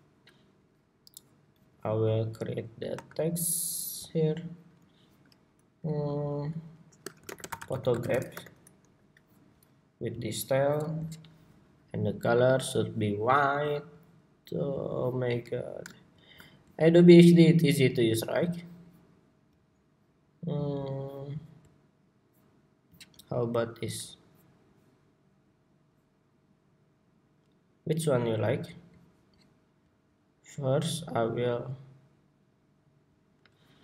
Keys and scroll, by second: 0.1 super+=, 8.5 Escape.